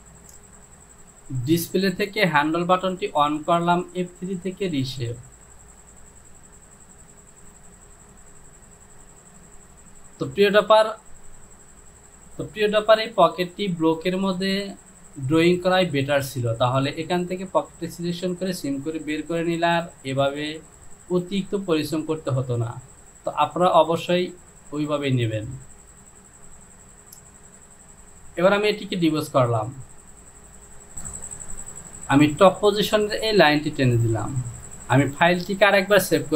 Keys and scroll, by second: 13.0 Home.